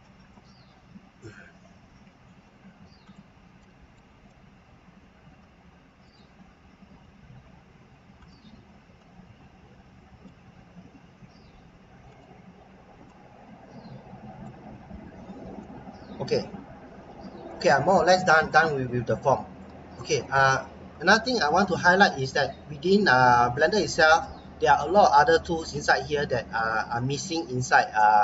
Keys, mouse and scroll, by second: 3.0 click, 3.6 middle click, 5.2 e, 6.0 click, 6.9 s, 8.2 click, 10.8 e, 12.1 click, 12.6-13.1 scroll down 1, 13.1 middle click, 15.5-17.0 scroll down 1, 17.0 Tab, 17.4 middle click, 18.8-19.2 scroll down 1, 19.3 middle click, 19.8-21.7 scroll up 1, 23.6 click.